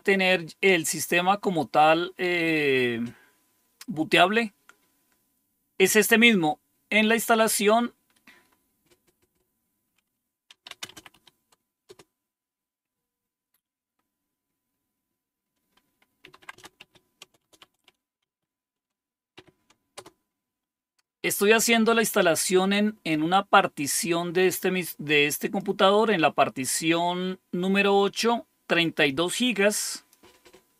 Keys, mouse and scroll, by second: 7.2 click, 8.4-9.6 scroll down 2, 10.1-11.8 typing, 15.9-18.1 typing, 19.3 typing, 19.9 Return, 23.0-25.5 drag, 29.9 click, 30.6 click.